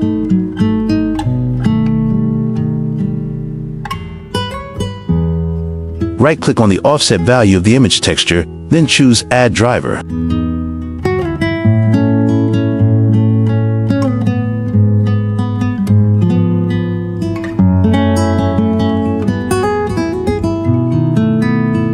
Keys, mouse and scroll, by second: 0.5 click, 2.4 click, 6.4 click, 7.7-10.1 right drag, 12.0-13.8 drag, 15.2 click, 16.1 click, 17.9-18.2 drag, 19.3 click.